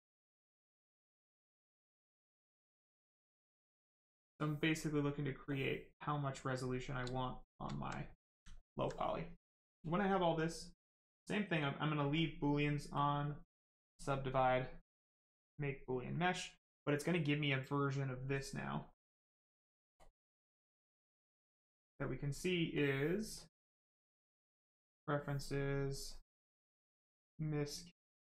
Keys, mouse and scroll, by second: 0.9 click, 4.8 click, 5.9 right click, 7.1 shift+right click, 7.6 alt+right click, 7.7 alt+right click, 8.3 alt+right click, 8.5 alt+right click, 9.5 click, 9.6 click, 12.1 click, 15.2 click, 18.2 click, 23.3 click, 26.5 click.